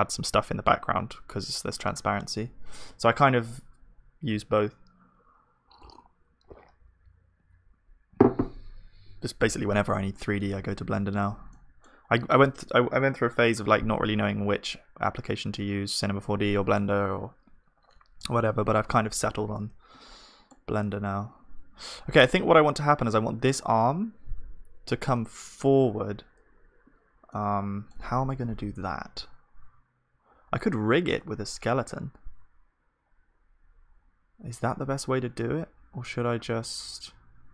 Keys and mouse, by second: 10.7 Tab, 11.5-19.4 middle drag, 19.6-37.5 middle drag.